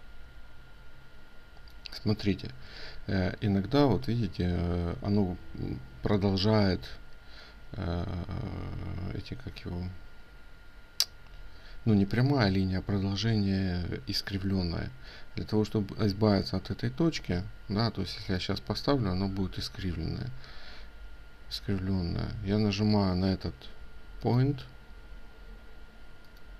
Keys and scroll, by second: 19.8 ctrl+z.